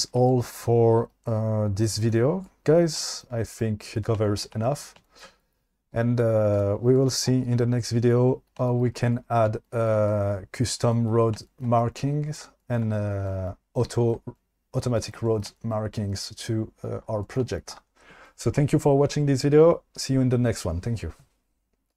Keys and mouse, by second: 6.5-6.9 drag.